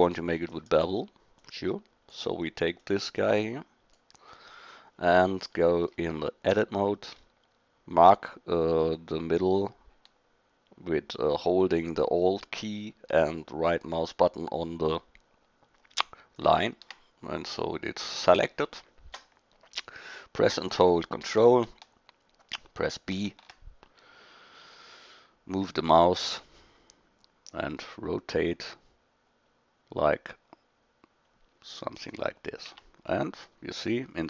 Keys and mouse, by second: 0.4 shift+d, 4.4-4.9 middle drag, 5.4-5.8 middle drag, 6.5 Tab, 23.1 ctrl+b, 32.7 Tab.